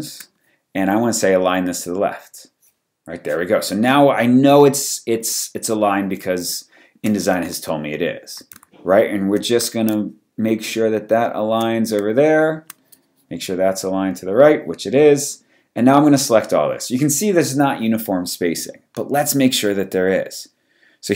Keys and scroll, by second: 6.2 space.